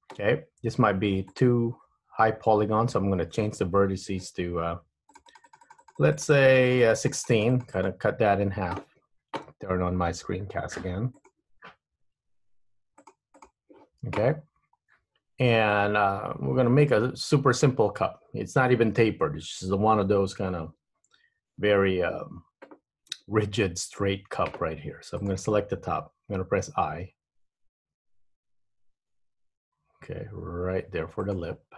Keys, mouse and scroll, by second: 14.4-15.8 scroll up 5, 15.8 middle click, 21.7 Tab, 23.3 3, 25.4 click, 26.6 i.